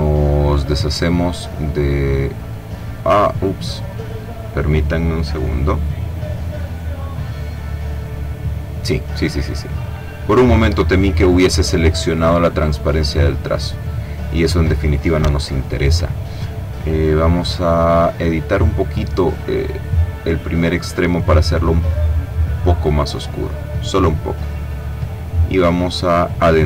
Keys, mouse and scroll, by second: 1.1 click, 4.7 click, 7.3 click, 10.3 click, 11.5 click, 12.6 click, 14.8 click, 16.3 click, 19.0 click, 20.8-22.7 drag, 24.4-26.6 drag.